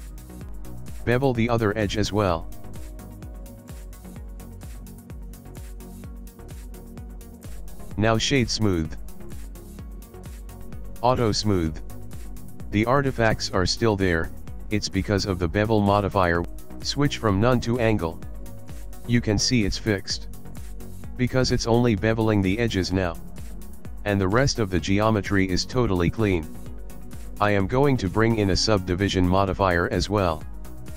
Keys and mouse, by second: 0.0 click, 1.4 ctrl+b, 4.8 middle click, 6.8 Tab, 8.0 right click, 9.7 click, 10.6 click, 11.3 click, 12.0 middle click, 13.9 click, 15.1 click, 17.3 click, 27.8 click, 29.0 click.